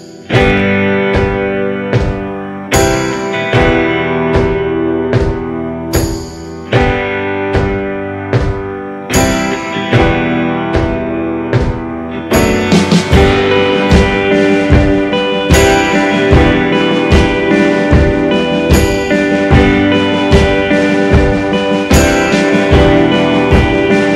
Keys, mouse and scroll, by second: 1.8 g, 11.6 g, 21.5 g.